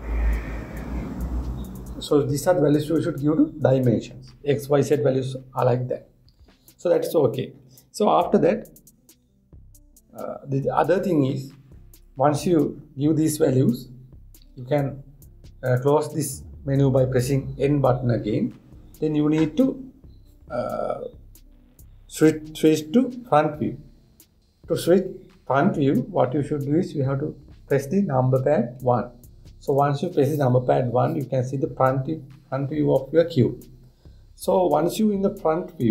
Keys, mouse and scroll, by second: 15.1 n, 29.4 KP_1.